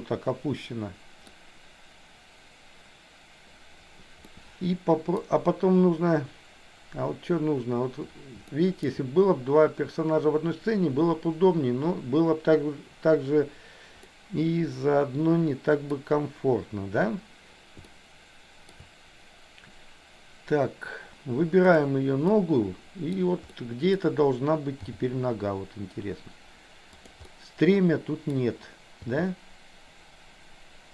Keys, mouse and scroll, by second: 4.3 scroll up 1, 4.4 middle click, 8.6 shift+middle click, 14.1-15.9 middle drag, 15.9 scroll down 1, 17.9 shift+middle click, 18.7 scroll down 1, 21.6 click, 22.3 middle click, 23.5 middle click, 24.8 g, 27.3-27.8 scroll up 1, 27.8 middle click, 29.1 g.